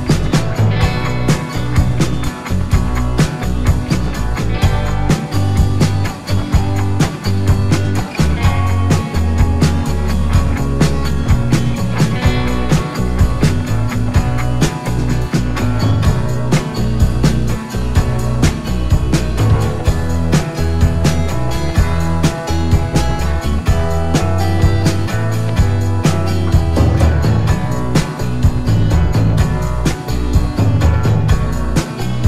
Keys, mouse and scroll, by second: 0.9 click, 2.8 click, 5.5 click, 6.7 t, 7.5 click, 8.7-13.9 typing, 14.9-16.3 typing, 16.7-17.2 scroll up 1, 17.2 click, 18.0 t, 18.7 click, 21.6 click, 22.7 Delete, 23.6 t, 24.5 click, 27.6-29.7 scroll down 1, 29.7 click, 30.4-31.4 scroll down 1, 31.4-31.9 scroll up 1.